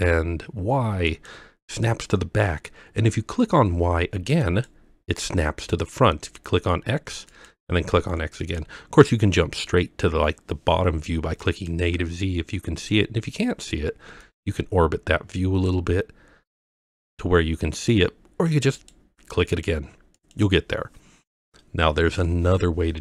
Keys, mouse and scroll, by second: 1.1 click, 4.4 click, 7.3 click, 8.4 click, 11.4 click, 14.2 click, 14.5-15.7 drag, 16.7 click, 18.8 click, 19.5 click, 20.2 click.